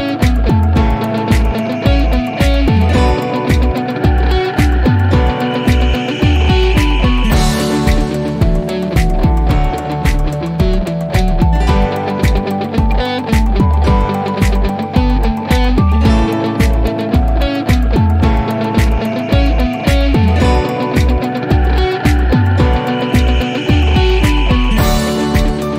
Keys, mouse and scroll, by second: 17.1-17.5 drag, 18.3-21.8 typing, 22.8 click, 24.6 click.